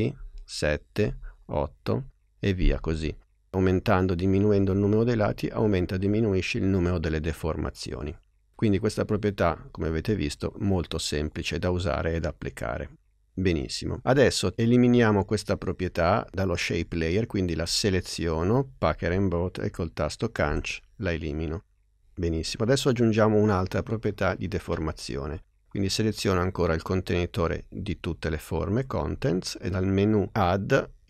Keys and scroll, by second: 0.3 Up, 20.5 BackSpace.